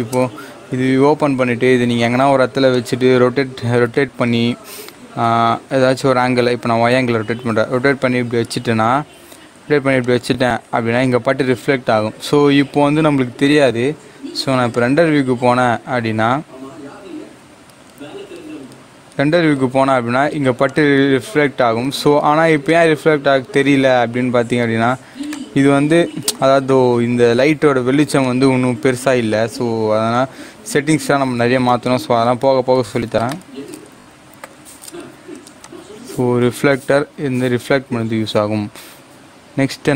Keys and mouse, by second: 0.6 g, 2.6 click, 3.7 r, 7.0 y, 10.0 click, 14.7 click, 20.6 click, 25.3-28.2 drag, 33.2-35.5 drag.